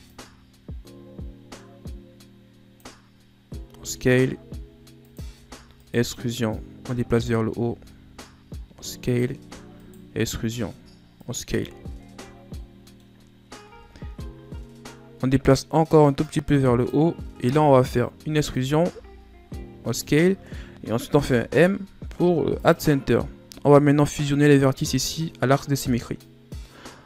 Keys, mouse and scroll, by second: 3.3 s, 6.2-7.2 drag, 7.2 s, 9.9 s, 11.2 Tab, 11.5-12.0 scroll down 6, 11.7 a, 12.2 middle click, 12.8-13.3 scroll up 4, 13.3 Tab, 13.6 scroll up 2, 15.9-17.9 drag, 17.9 e, 20.7 m, 22.8-23.6 scroll up 1, 23.6-24.6 scroll up 2, 24.6-25.8 middle drag, 25.8-27.0 drag.